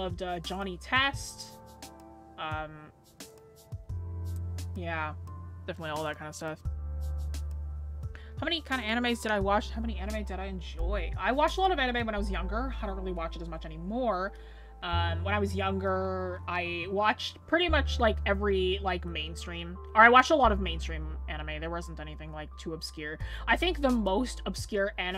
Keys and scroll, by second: 13.4-14.2 scroll down 1.